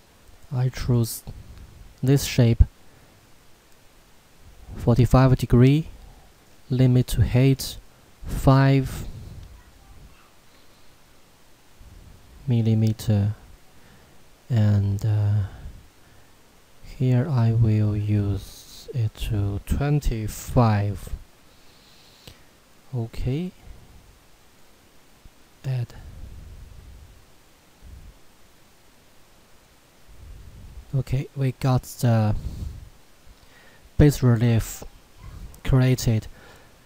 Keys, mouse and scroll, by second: 0.8 click, 6.4 click, 7.8 5, 11.9 click, 23.2 click, 30.2-30.9 scroll up 1, 30.9 middle click, 31.7 scroll up 1, 32.3 middle click, 33.6-34.9 scroll down 1, 35.0 shift+middle click, 35.8-36.8 scroll up 1.